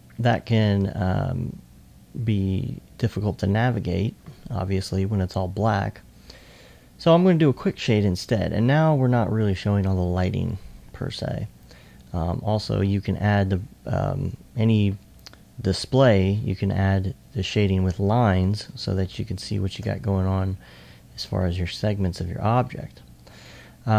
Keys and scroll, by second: 22.4 alt+s, 23.8 alt+s.